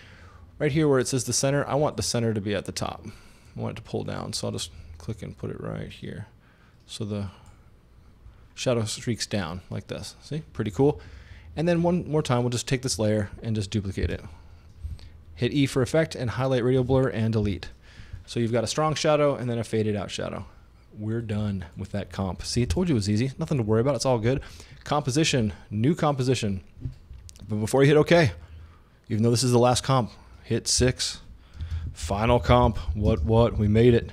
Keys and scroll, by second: 14.1 super+d, 14.9 super+e, 17.5 Delete, 22.7 super+s, 30.8-34.1 typing.